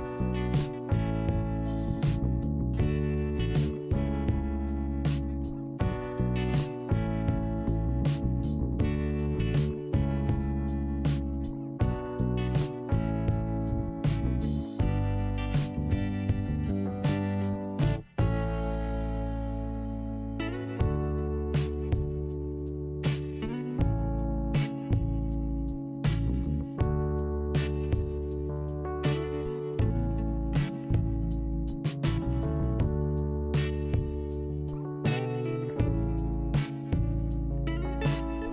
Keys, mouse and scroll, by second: 1.0 click, 5.1 5, 6.5 5, 7.3 click, 9.4 click, 9.8 scroll down 1, 10.8 click, 11.6-12.3 scroll down 1, 13.1 click, 15.5 click, 16.3 click, 17.0 scroll up 2, 18.6 click, 19.9 click, 22.0 click, 23.3 click, 24.5 click, 26.0 click, 27.2 click, 28.9 click, 30.2 click, 32.4-32.9 scroll down 1, 33.6 click, 34.8 click, 36.4 scroll up 1, 36.7 click, 38.4 click.